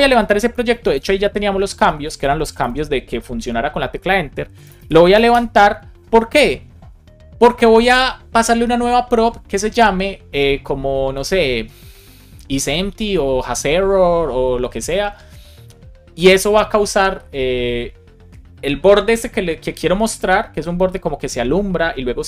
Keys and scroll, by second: 0.9 Return, 2.2 Return, 5.2 Return.